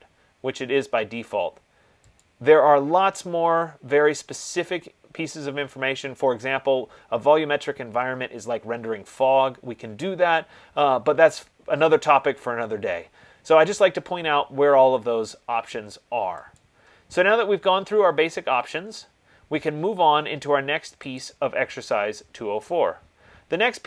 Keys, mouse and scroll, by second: 2.6 click, 17.0 click, 21.4 click.